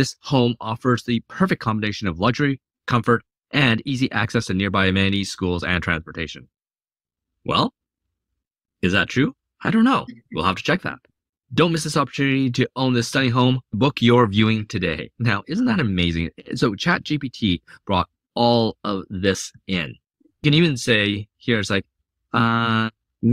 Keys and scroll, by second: 22.4-23.3 typing.